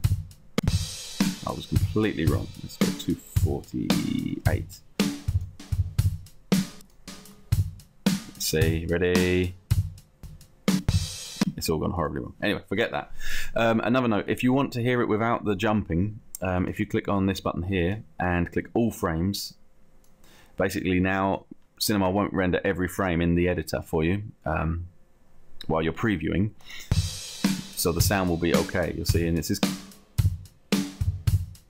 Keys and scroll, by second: 2.8 2, 4.5 8.